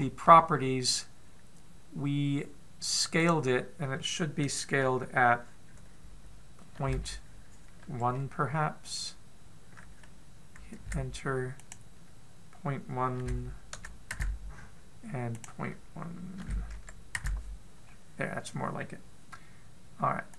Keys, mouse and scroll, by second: 3.8 click, 3.8 scroll up 5, 7.2 click, 12.1 click, 15.9 click, 18.4-19.1 scroll up 2.